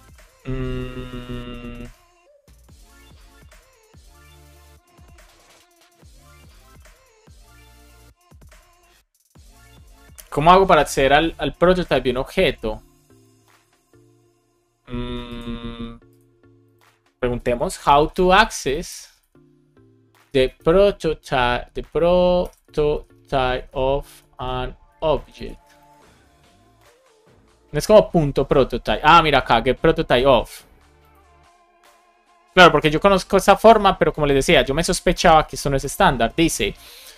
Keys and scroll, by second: 17.5 shift+h, 17.9 space, 22.3 BackSpace, 23.3 space, 24.3 space, 25.8 Return.